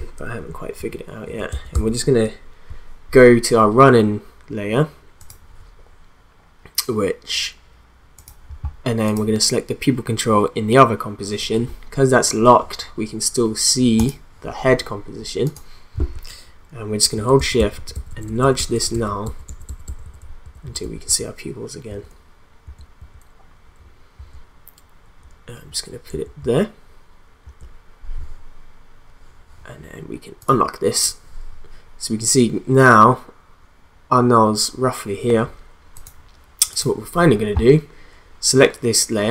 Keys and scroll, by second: 0.8 shift+Up, 17.1 shift+Up, 22.6 shift+Left, 23.0 shift+Up, 24.2 shift+Right, 25.7 Down, 26.1 Left, 27.4 Right.